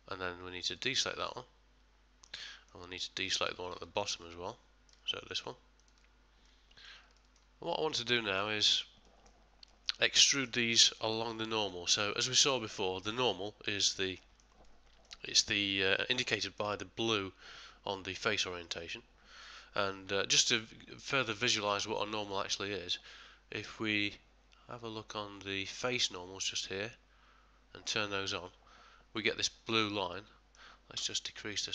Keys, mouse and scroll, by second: 0.7 shift+click, 1.2 middle click, 2.5 ctrl+middle click, 3.2 shift+middle click, 3.6 middle click, 4.2 ctrl+middle click, 5.8 shift+click, 6.5 middle click, 7.0 middle click, 7.2 ctrl+middle click, 7.7 middle click, 8.2 shift+middle click, 8.6 ctrl+middle click, 8.9 ctrl+middle click, 9.1 shift+middle click, 9.7 middle click, 10.2 shift+middle click, 10.8 ctrl+middle click, 11.7 middle click, 14.2 middle click, 14.6 ctrl+middle click, 15.5 ctrl+middle click, 22.2 click, 30.1-30.7 middle click, 30.3 middle click.